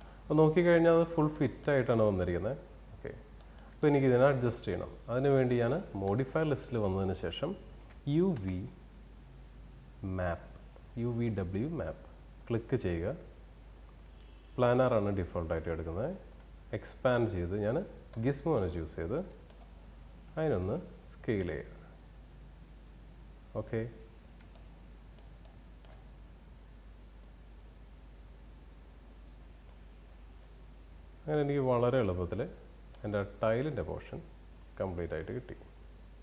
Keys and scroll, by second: 8.0 u, 8.5 v.